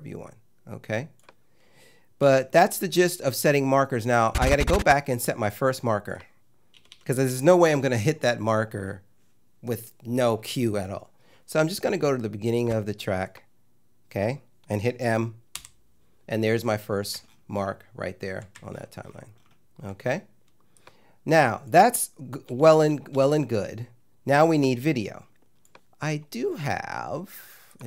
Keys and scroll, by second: 2.2 -, 6.8 =, 15.6 m, 22.5 -.